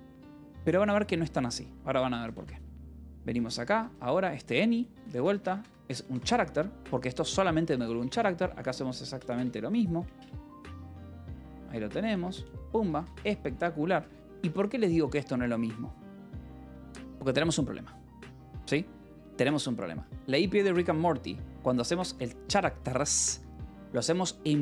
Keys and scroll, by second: 0.7 j, 1.8-5.4 typing, 5.7 Escape, 6.6 ctrl+s, 6.9-10.9 typing, 11.2 Return, 12.2 Escape, 12.8-15.1 typing, 20.5 h, 21.6-22.5 typing, 22.6 Escape.